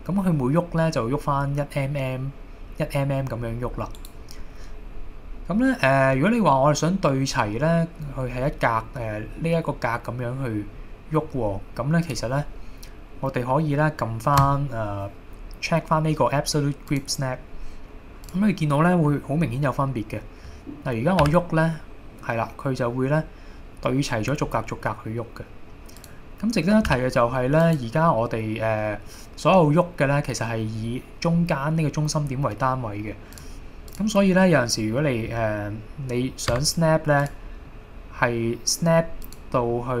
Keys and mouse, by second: 4.0 right click, 12.1-17.4 drag, 18.3 click, 21.3 g, 26.0 click, 26.9 g, 27.7 click, 36.6 Tab, 37.3 click, 37.7-38.1 middle drag, 38.3-38.9 middle drag, 39.7-40.0 middle drag.